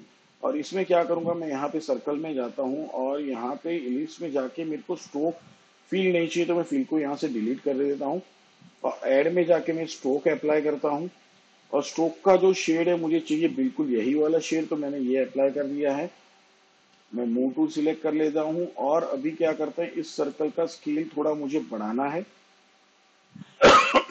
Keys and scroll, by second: 8.7 Delete, 18.5 v, 22.7 s.